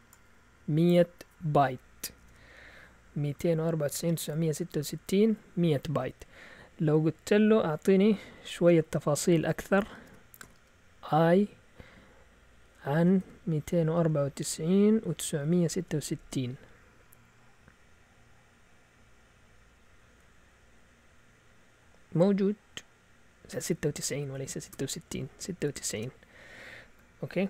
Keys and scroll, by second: 2.2 alt+Tab, 3.9 alt+Tab, 6.2 Up, 7.2 Left, 7.4 Left, 7.6 Left, 7.7 Left, 7.9 Left, 8.0-8.5 Left, 8.5 Right, 8.6 Right, 8.8 Right, 8.9 Right, 9.0 Right, 9.2 Right, 9.9-10.9 typing, 12.7-16.3 typing, 23.6 Up, 23.8-25.3 typing, 25.9 Return.